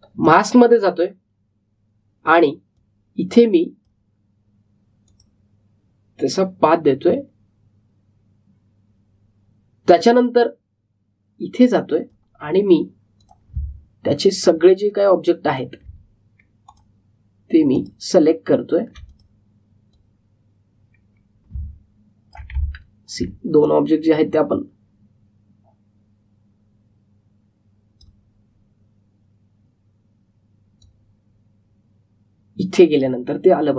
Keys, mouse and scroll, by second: 3.0-3.8 typing, 3.7-8.1 drag, 11.1-14.4 drag, 13.1-13.8 typing, 14.7 alt+scroll up 1, 16.4-23.7 drag, 23.7 alt+scroll down 1, 24.6-31.7 drag, 31.7-33.7 drag.